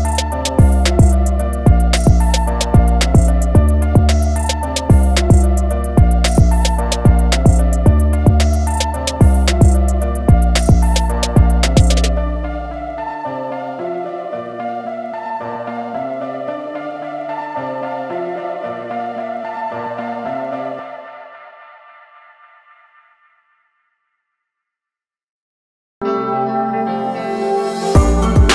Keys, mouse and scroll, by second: 1.0 Escape, 1.9 click, 4.5 Escape, 6.2 click, 8.5 Escape, 9.7 click, 11.7 Escape, 13.1 click, 13.6-14.3 scroll down 1, 14.5-15.1 alt+scroll up 2, 15.7 click, 17.9 click, 21.2-21.5 scroll up 1, 22.2 alt+scroll up 1, 22.4-23.0 scroll down 1, 23.0 click.